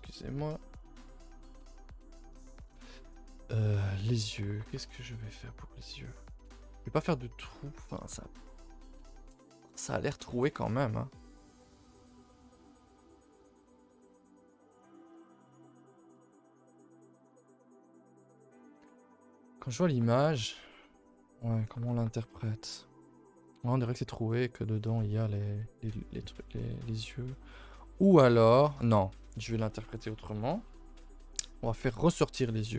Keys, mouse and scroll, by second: 4.1 click, 13.7 middle click, 14.1-14.6 middle drag, 14.6-16.0 scroll up 17, 15.0 shift+middle drag, 16.0 shift+middle drag, 16.2-17.3 scroll up 7, 17.3 KP_5, 17.9 scroll down 2, 18.6-18.9 scroll up 3, 18.9 shift+middle drag, 19.1 scroll, 27.8-28.2 middle drag, 28.2 scroll down 2, 28.5-29.1 shift+middle drag, 29.1 scroll down 1, 32.3 a, 32.5 a.